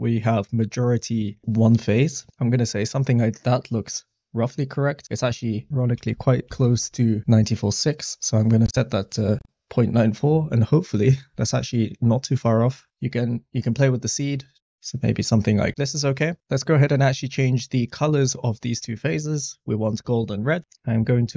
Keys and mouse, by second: 5.2-6.7 drag, 8.6 click, 14.3 click, 14.8 click, 15.6 click, 19.9 click.